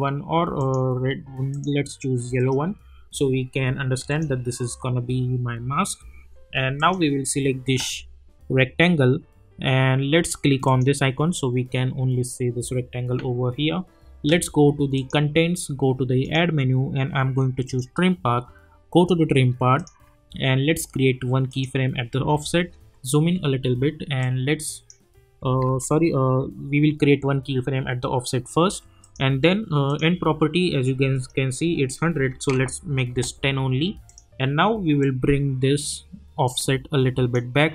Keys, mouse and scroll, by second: 6.7 click, 10.6 click, 14.3 click, 22.7-23.4 alt+scroll up 1, 24.2-25.1 drag, 25.6 ctrl+z, 29.0 click, 33.1 Return, 34.1-37.5 drag.